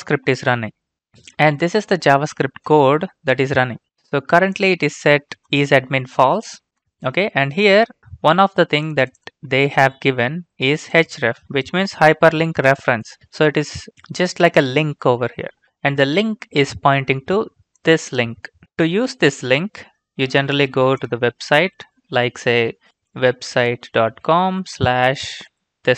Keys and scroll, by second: 18.6 ctrl+c, 21.5 Return, 21.7 Return, 22.6-25.5 typing, 25.7 ctrl+v.